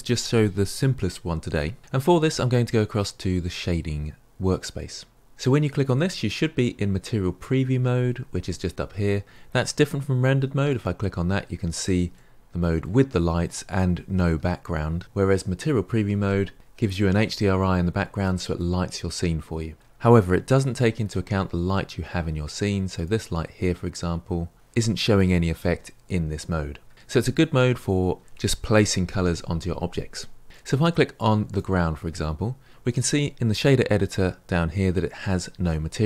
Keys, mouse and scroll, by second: 4.9 click, 5.1-6.2 right drag, 10.7 click, 12.1-19.7 middle drag, 20.7-23.0 shift+middle drag, 23.0 click, 31.5 click.